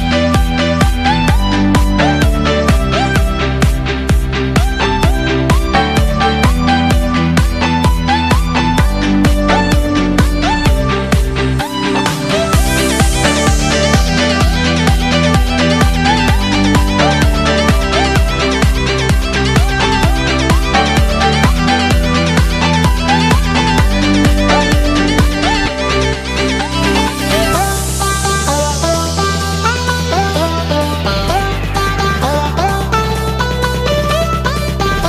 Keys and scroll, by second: 0.2 ctrl+z, 3.2 ctrl+-, 3.9 space, 7.2 ctrl+=, 7.7 space, 8.0 ctrl+=, 17.4 ctrl+-, 18.9 ctrl+=, 19.3 space, 20.0 ctrl+=, 20.6 space, 23.2 ctrl+-, 23.9 space, 24.0 ctrl+=, 24.2 space, 31.2 space, 33.5 ctrl+=.